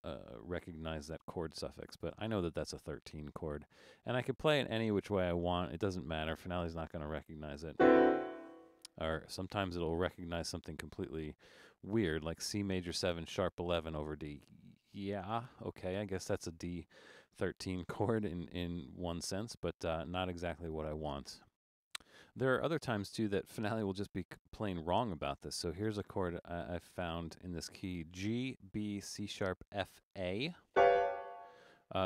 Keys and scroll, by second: 18.8 BackSpace, 19.6 BackSpace.